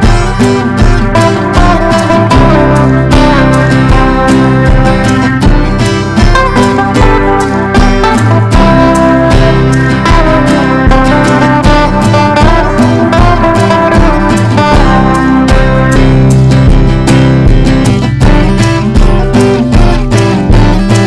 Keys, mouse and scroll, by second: 0.0-0.8 typing, 1.5 Return, 2.0-10.5 typing, 12.1-19.8 drag, 20.9 Up.